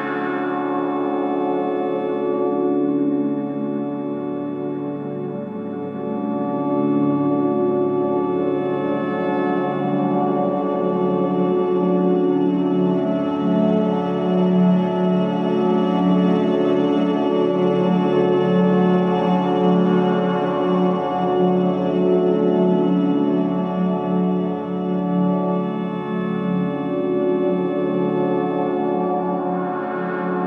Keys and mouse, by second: 1.0 click, 2.4 alt+shift+click, 5.6 alt+shift+click, 7.9 click, 9.9-12.0 middle drag, 13.6 click, 16.4 alt+shift+click, 17.6 click, 19.3 alt+shift+click, 22.4 right click, 24.8-27.3 middle drag, 27.9-28.3 middle drag, 29.7-30.2 drag.